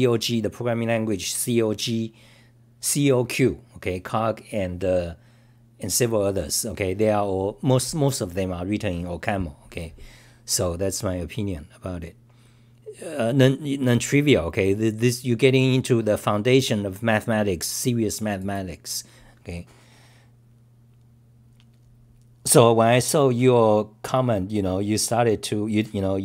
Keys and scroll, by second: 8.5-9.2 typing, 23.3-24.0 typing.